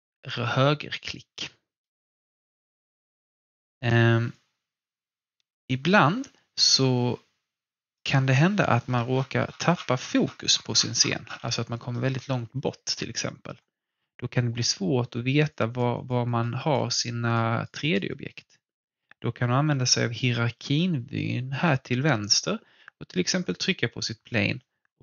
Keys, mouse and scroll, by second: 4.3-8.5 alt+drag, 9.0 scroll up 1, 9.1-9.5 scroll down 1, 10.5-11.0 alt+scroll down 2, 11.9-15.5 alt+middle drag, 15.5 click, 23.5 click.